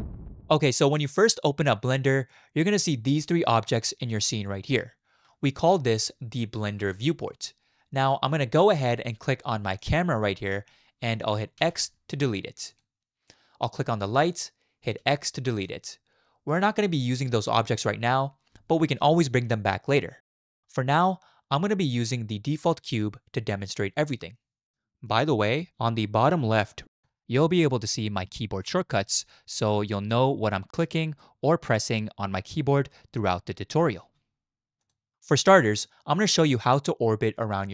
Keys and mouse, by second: 11.6 x, 15.0 x, 22.1-25.2 drag, 31.0 click.